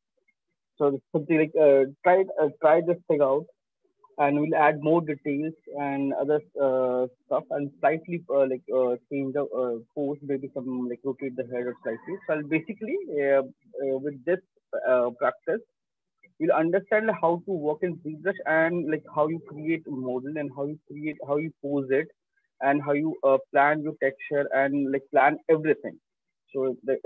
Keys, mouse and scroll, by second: 8.0 click, 8.3 scroll.